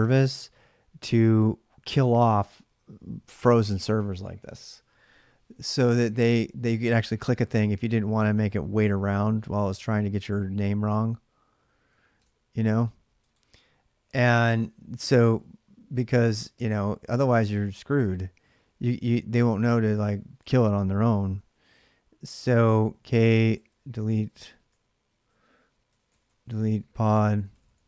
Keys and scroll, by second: 11.9 alt+Tab, 14.0 ctrl+[, 14.2 k, 14.4 Return, 16.3 ctrl+c, 21.1 ctrl+[, 21.3-27.8 typing.